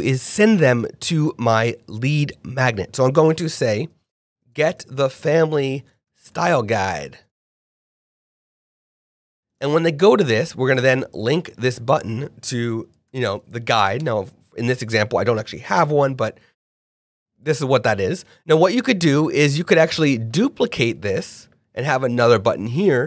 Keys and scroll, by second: 4.1-9.5 typing, 12.9-13.3 typing, 14.0 Return.